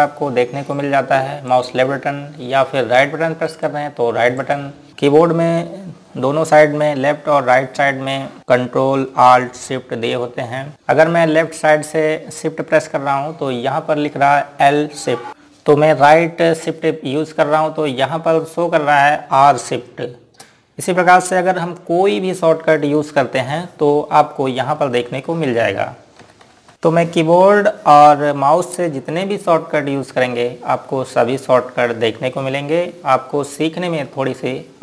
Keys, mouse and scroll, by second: 1.1 click, 3.0 right click, 4.0 click, 25.2-26.0 typing.